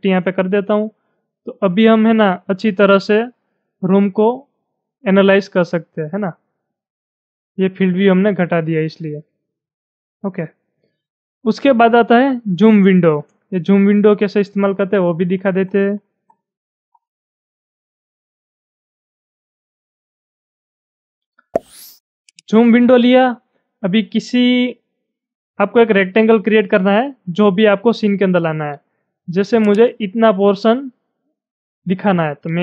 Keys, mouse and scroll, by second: 1.4 middle click, 2.4-2.7 scroll up 5, 2.7 middle click, 2.8-5.3 middle drag, 5.3-7.0 shift+middle drag, 7.0-11.2 shift+middle drag, 13.2 middle click, 13.3 shift+middle click, 14.6 scroll down 6, 15.4 scroll down 6, 16.0-16.4 scroll down 8, 16.9 scroll down 1, 17.2-19.7 shift+middle drag, 19.7-20.0 scroll up 3, 20.1-22.3 middle drag, 22.3 click, 29.6-32.6 drag.